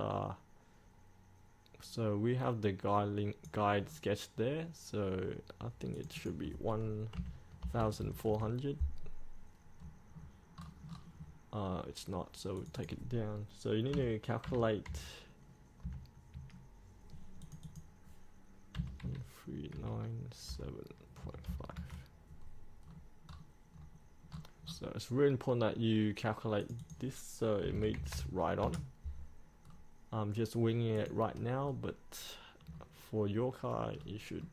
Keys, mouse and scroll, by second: 4.1 scroll down 1, 6.1 click, 7.3 KP_1, 9.8 scroll up 1, 10.0-10.3 scroll down 1, 11.0 scroll up 1, 12.7 click, 14.1 KP_1, 17.6 click, 19.0 KP_1, 21.4 KP_Decimal, 21.7 KP_5, 23.0 scroll down 1, 24.5 scroll up 1, 26.8 click, 27.8 KP_1, 29.8 scroll down 1, 31.2 click, 32.0 scroll up 1.